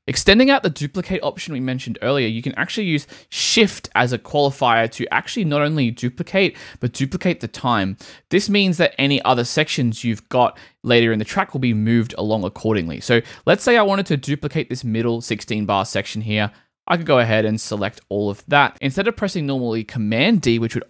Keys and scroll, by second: 20.4 super+d.